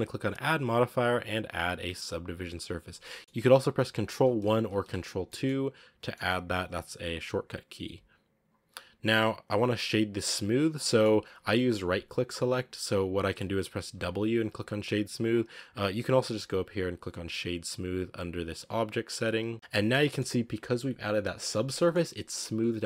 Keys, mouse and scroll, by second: 0.2 click, 3.2 middle click, 4.1 ctrl+1, 4.5 ctrl+2, 5.1 middle click, 5.7 scroll down 3, 5.8 middle click, 6.4-7.6 scroll up 2, 7.6 click, 8.6-9.0 scroll up 3, 9.2 scroll down 3, 9.3-10.1 middle drag, 10.1 scroll up 3, 10.5 scroll down 2, 10.6-13.8 middle drag, 13.8 w, 15.9-19.0 drag, 19.4-20.3 middle drag, 20.3-21.6 scroll down 1, 21.6-22.8 middle drag.